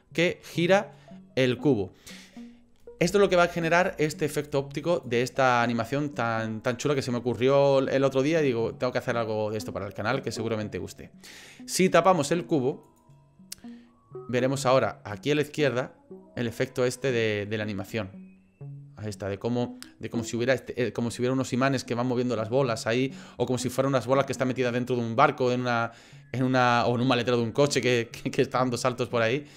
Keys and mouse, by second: 3.0 space, 4.5 click, 10.1 click, 12.9 click, 15.1 click.